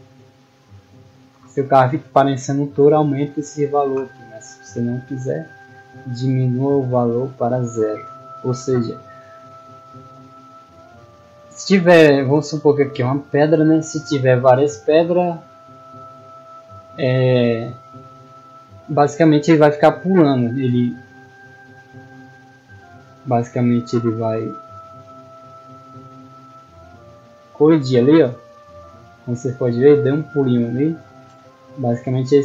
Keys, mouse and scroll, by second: 8.9 middle click, 9.6 shift+middle drag, 10.3 right click, 12.7 middle drag, 13.2 s, 14.4 click, 16.6 s, 18.1 click, 21.8-22.3 middle drag, 22.8 click, 24.5-27.3 typing, 31.7 s.